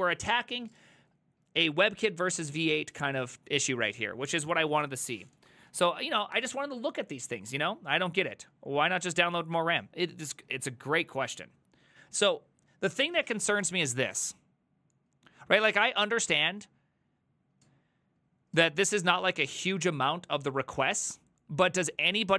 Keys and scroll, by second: 9.6 alt+{.